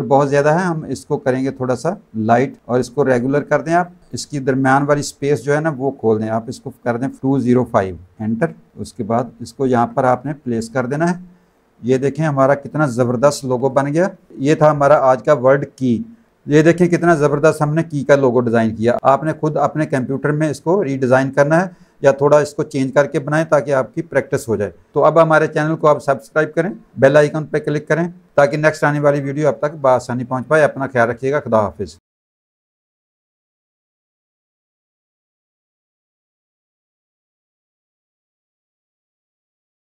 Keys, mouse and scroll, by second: 3.2 click, 6.8 click, 7.2 KP_2, 8.8 click, 10.0 click, 10.8 alt+click, 11.4 alt+click, 12.1 click, 14.1 space, 14.3 click.